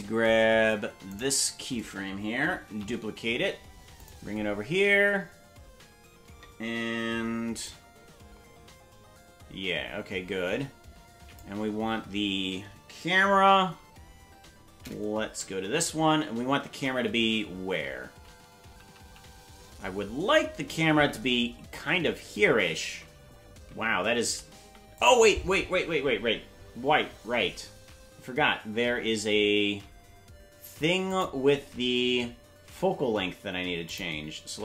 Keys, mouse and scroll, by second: 1.1 right click, 2.7 shift+d, 7.7-11.4 drag, 15.3 Right, 16.7 shift+`, 31.1 click, 34.2 click.